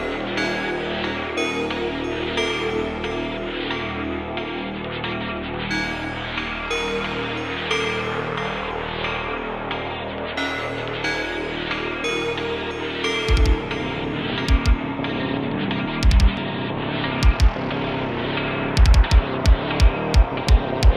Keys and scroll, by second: 3.0 /, 6.1 q, 9.8 shift+a, 11.6 s, 14.0 s, 19.5 s, 20.3 `, 20.9 shift+d.